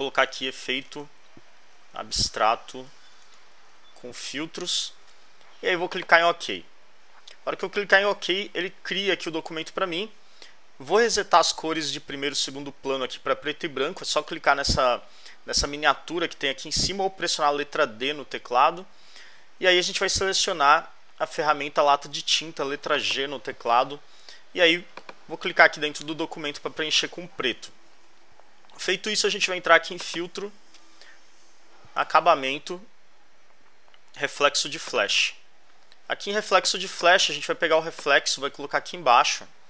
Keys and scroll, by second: 0.0-4.6 typing.